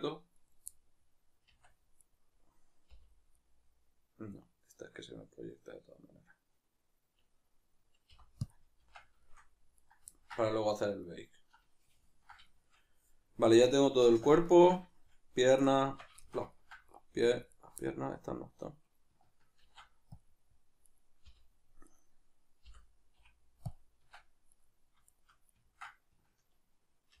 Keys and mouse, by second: 0.4 right click, 0.7-1.4 middle drag, 1.4 Tab, 2.0 right click, 2.9 l, 3.4-9.8 middle drag, 9.8 right click, 10.2-11.1 ctrl+middle drag, 11.1 right click, 11.7-15.7 middle drag, 15.7 right click, 15.9 Tab, 16.3-17.5 ctrl+shift+middle drag, 17.5 alt+right click, 17.8-20.9 middle drag, 19.6 ctrl+e, 20.9 right click, 21.3 l, 22.7 l, 24.5-25.7 right drag, 25.7-27.2 ctrl+middle drag.